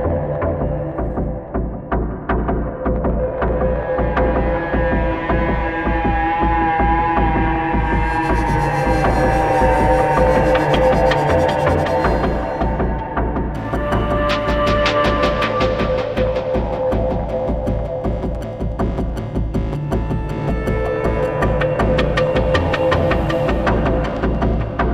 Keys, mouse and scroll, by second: 8.5 ctrl+d, 8.6 ctrl+0, 13.4 space, 18.8 scroll down 1, 19.7 double click, 20.2 w, 23.7 ctrl+scroll up 1.